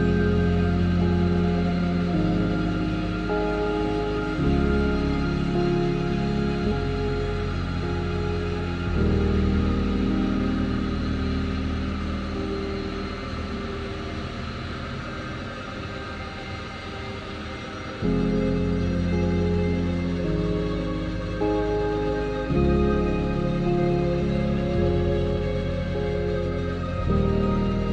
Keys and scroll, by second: 0.3 ctrl+z, 1.6 shift+x, 5.3 s, 8.1 ctrl+z, 8.7 ctrl+z, 10.1 ctrl+r, 12.0 ctrl+e, 12.6 ctrl+r, 16.2 ctrl+z, 16.8 ctrl+z, 17.2 ctrl+r, 18.9 ctrl+r, 21.8 ctrl+r, 23.7 ctrl+r.